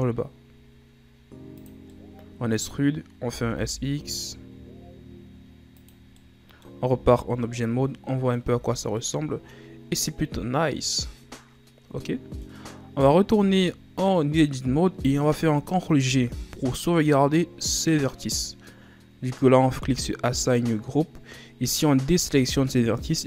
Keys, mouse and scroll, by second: 2.1-3.4 middle drag, 3.4 s, 6.3 middle click, 7.0 Tab, 7.5 scroll down 3, 7.8-8.7 middle drag, 8.7 a, 9.2-12.2 middle drag, 13.0-13.6 scroll up 3, 13.6 Tab, 16.2 ctrl+g, 22.4 a.